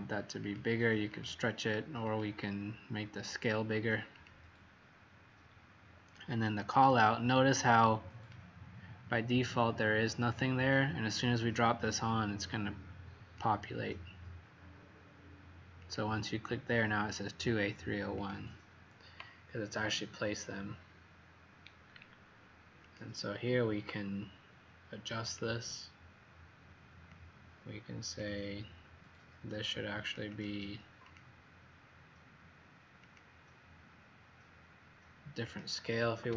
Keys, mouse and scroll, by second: 1.1 click, 2.0 click, 19.6 scroll up 4, 21.6-22.1 scroll down 3, 22.8 click, 30.2 click, 31.0 click.